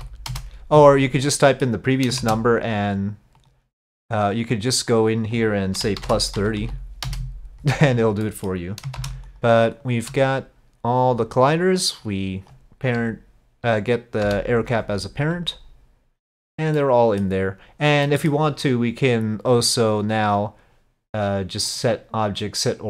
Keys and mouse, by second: 1.3 middle click, 2.2 shift+d, 4.4-7.9 drag, 8.3 middle click, 9.0 shift+d, 12.0 ctrl+click, 14.3 ctrl+p, 16.8-17.2 drag, 18.1 drag, 20.0 click, 21.8-22.8 drag.